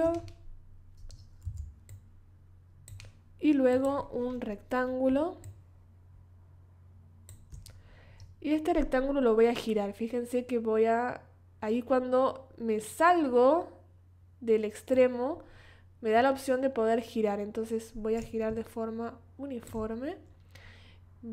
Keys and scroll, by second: 1.4 v.